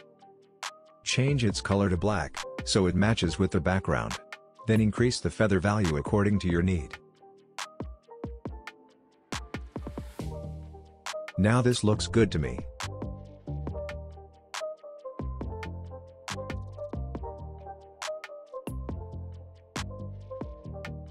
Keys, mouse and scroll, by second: 0.2-1.3 drag, 5.3-10.3 drag, 10.9-12.4 scroll up 1, 12.4-13.7 scroll down 1, 13.7 click, 16.7-17.5 scroll up 1, 17.5-18.3 scroll down 1, 18.3-21.1 drag.